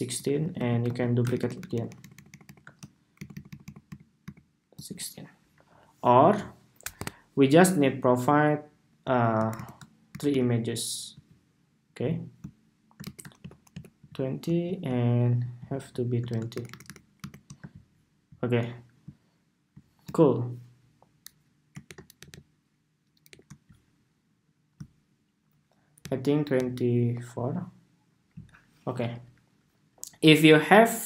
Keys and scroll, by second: 0.3 super+c, 0.6 super+v, 2.9 alt+Right, 3.0 alt+Right, 3.2 alt+Right, 3.6 alt+Right, 4.0 alt+Right, 9.2 alt+shift+Right, 9.8 alt+Right, 10.0 alt+Right, 12.7 alt+shift+Right, 13.1 alt+Left, 13.4 alt+Left, 14.7 alt+Left, 16.2 alt+Right, 16.5 alt+Right, 16.9 alt+Right, 18.2 alt+Right, 21.6 alt+shift+Up, 21.9 alt+Down, 23.0 alt+Up, 24.3 alt+Up, 26.3 alt+Down, 27.5 alt+Down.